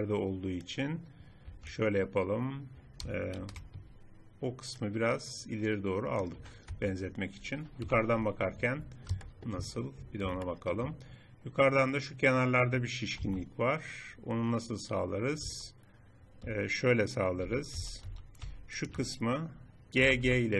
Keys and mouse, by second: 3.4 ctrl+KP_Add, 6.8 Tab, 7.8 KP_7, 13.3 Tab, 15.4 z, 17.7 a, 17.8 a, 18.2 a, 20.0 g.